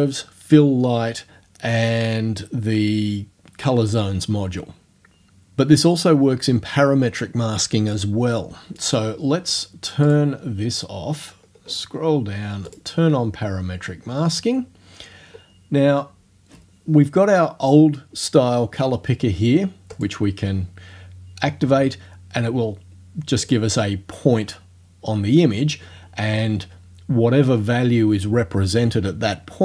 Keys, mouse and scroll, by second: 10.1 click, 11.1-11.9 scroll down 1, 12.7 click, 12.9 middle click, 13.7-14.5 scroll down 1, 14.9-15.5 scroll down 2, 19.9 click, 23.5 click.